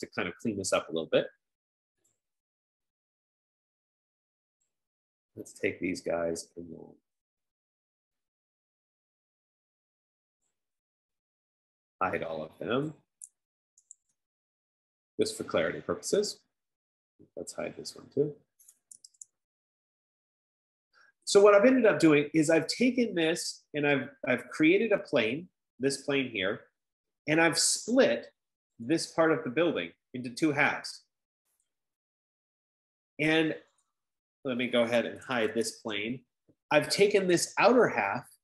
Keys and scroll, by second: 14.1-16.3 typing, 18.0-20.3 typing, 35.4-36.8 typing.